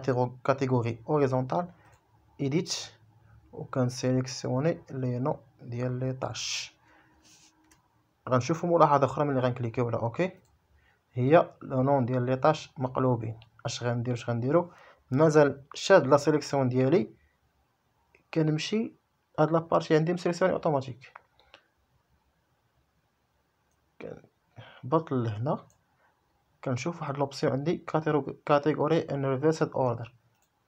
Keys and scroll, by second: 7.7 Return.